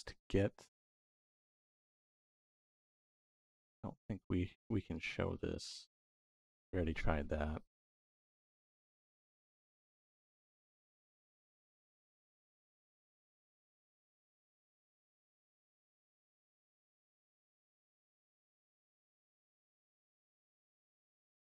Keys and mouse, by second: 4.8-10.5 drag, 11.3 middle click, 12.5 click, 14.3 click, 14.9 x, 15.3 middle click, 17.3-18.3 drag, 18.4 click, 18.9-21.4 drag, 20.0 BackSpace, 20.2 BackSpace, 20.6 BackSpace.